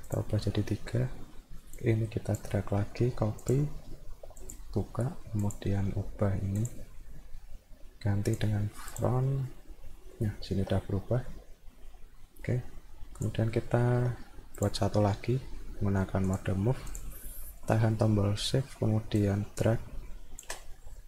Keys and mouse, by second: 0.1 click, 1.8 click, 3.4 click, 4.4 click, 5.4 click, 6.6 click, 8.3 click, 8.9 click, 10.0 alt+middle click, 11.3-12.5 alt+middle drag, 13.2 click, 13.6 alt+middle click, 14.6 click, 16.3 click, 16.9 click, 17.5 middle click, 19.2-20.4 shift+drag.